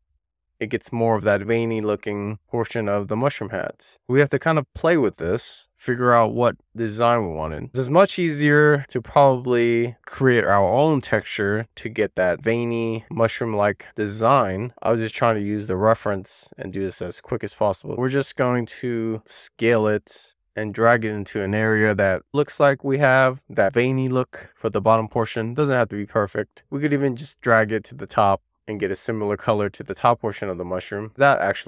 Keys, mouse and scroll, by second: 1.4 w, 2.1 click, 3.4 e, 3.6 r, 4.3 click, 5.6 w, 5.8 click, 6.1 e, 6.3 r, 6.4 click, 9.0 w, 9.2 r, 9.8 click, 10.7 w, 10.9 click, 11.4 r, 11.6 click, 12.4 click, 13.0 super+z, 13.2 super+z, 14.2 w, 14.3 click, 14.6 e, 14.9 click, 15.8 click, 16.7 super+z, 16.8 super+z, 17.0 super+z, 17.3 super+z, 17.4 super+z, 18.4 w, 18.6 click, 20.7 click, 22.1 w, 22.2 click, 24.4 middle click, 25.2-25.5 scroll up 2, 25.8 middle click, 26.3 click, 28.0-28.5 scroll down 3, 28.5 middle click, 29.1-30.0 scroll up 1, 30.0 e, 30.3 click, 31.0 w, 31.2 scroll up 3, 31.5 click.